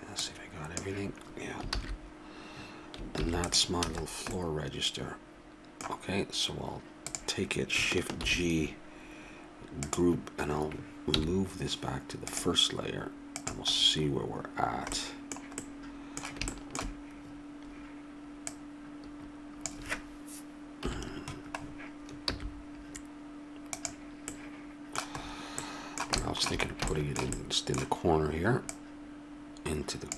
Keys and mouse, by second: 0.1-1.6 drag, 1.8 ctrl+z, 3.1 ctrl+s, 3.9 a, 4.3-6.0 middle drag, 7.1-8.8 drag, 8.2 shift+g, 11.1 m, 15.1 middle click, 16.5-18.2 middle drag, 18.4-20.8 drag, 20.8 KP_7, 22.3 g, 26.7 middle click, 27.1 middle click.